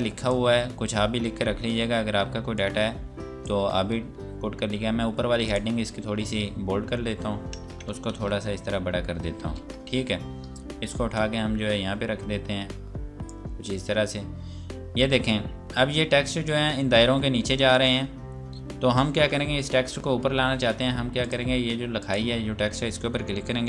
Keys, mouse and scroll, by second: 0.5-1.8 scroll up 1, 1.8 F8, 2.6 click, 7.9 ctrl+KP_6, 9.4 ctrl+space, 10.2 scroll down 1, 11.0 click, 13.6 scroll down 1, 14.8-15.4 scroll up 1, 21.2 click.